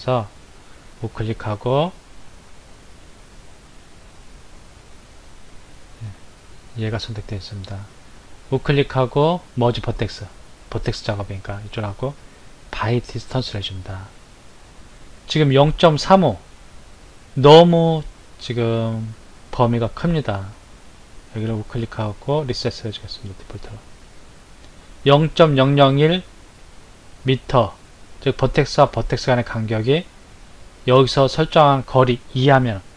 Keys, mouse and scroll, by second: 6.5 click, 7.8 right click, 21.1 right click.